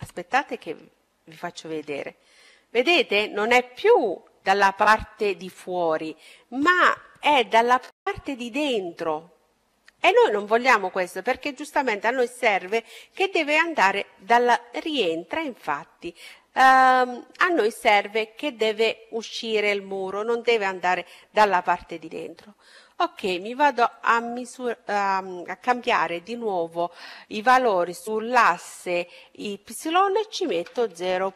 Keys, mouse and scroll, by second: 0.2-3.9 middle drag, 22.5-24.3 drag.